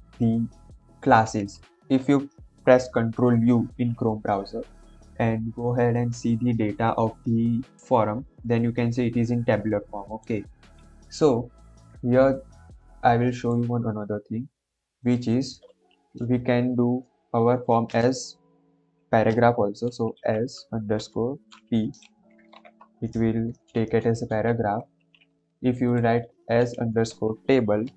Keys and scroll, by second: 19.2-21.4 typing, 21.9 ctrl+s, 26.7 Right, 27.0-27.9 typing.